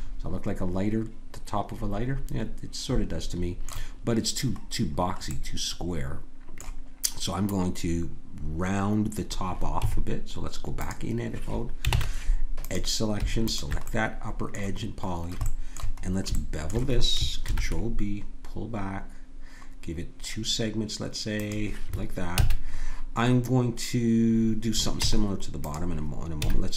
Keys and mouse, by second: 0.1-1.7 drag, 4.8-8.5 middle drag, 9.8 Tab, 11.9 ctrl+Tab, 13.5 click, 14.5 click, 17.5 ctrl+b, 22.4 a, 25.0 Tab, 26.4 a.